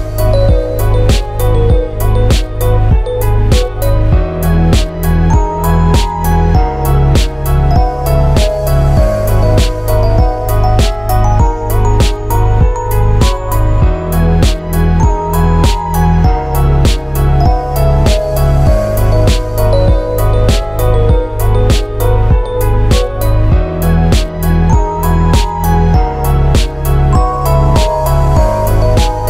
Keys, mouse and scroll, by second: 0.8 middle click, 1.9 click, 2.9 middle click, 4.7 shift+middle click, 4.9 scroll down 1, 5.1 shift+middle click, 5.2 middle click, 5.7 Tab, 6.3 click, 7.4 middle click, 8.1-11.0 typing, 9.3 click, 12.2 l, 13.1 Tab, 13.5 click, 14.0 shift+click, 14.1 shift+click, 15.3 ctrl+l, 17.0 ctrl+l, 18.5 click, 18.9 middle click, 20.5 click, 21.2 r, 24.4 ctrl+shift+right click, 25.0 r, 27.7 middle click, 28.4 Tab.